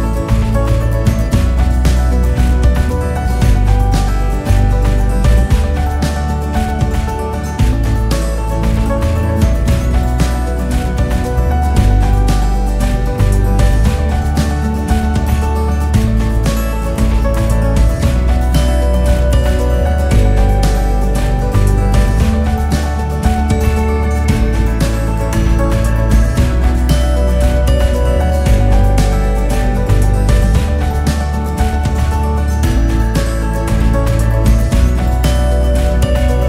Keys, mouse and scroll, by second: 0.9 e, 5.8 click, 7.8 click, 9.8 h, 10.1 click, 12.5 click, 13.5 KP_2, 13.7-14.5 KP_2, 14.7 KP_2, 16.3 click, 18.7 KP_2, 19.0 KP_2, 20.3 e, 22.7 s, 26.3 click, 27.9 e, 32.0 s, 34.6 KP_1.